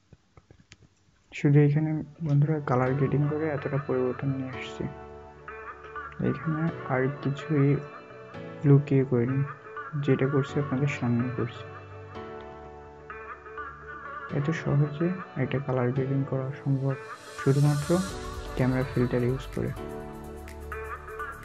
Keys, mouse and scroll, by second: 2.4 scroll, 2.6-3.3 alt+scroll up 1, 3.3 scroll up 1, 3.9 alt+scroll up 1, 4.9-5.4 alt+scroll down 1, 9.5-10.0 alt+scroll down 2, 10.4 alt+scroll up 1, 11.9-12.4 alt+scroll down 1, 13.3 alt+scroll up 1, 15.7-16.1 alt+scroll down 1.